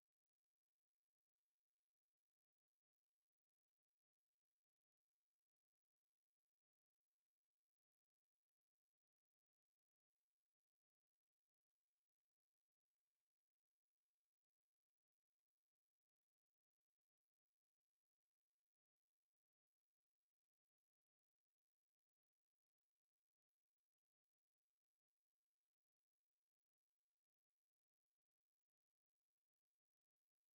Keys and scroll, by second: 0.1 Return, 1.0 space, 1.1 5, 1.2 space, 1.5 o, 2.6 Escape, 2.8 e, 2.8 space, 3.7 Escape, 13.2 3, 13.5 KP_Multiply, 13.9 3, 14.0 Return, 14.2 KP_Add, 14.6 2, 14.8 KP_Add, 17.0 e, 17.2 space, 20.8 9, 22.3 space, 24.7 KP_Divide, 25.2 Return, 27.4 1, 28.9 Escape, 30.3 space.